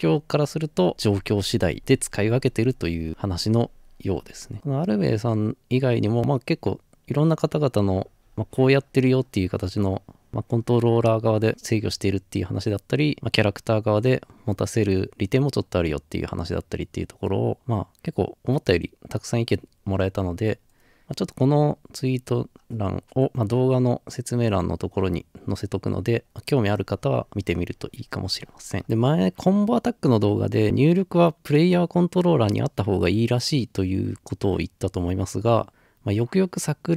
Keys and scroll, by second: 4.7-5.2 scroll up 2, 6.0-6.8 scroll up 3, 7.8 scroll up 1, 8.7 scroll down 1, 9.2-9.8 scroll up 2, 10.1 scroll down 1, 10.6 scroll up 1, 11.9 scroll down 2, 12.6 scroll up 2, 13.1 scroll down 2, 14.2 scroll up 4, 15.3-15.7 scroll up 4, 16.3 scroll down 2, 19.2 scroll up 1, 22.7 scroll up 1, 25.7 scroll down 1, 26.1 scroll up 2.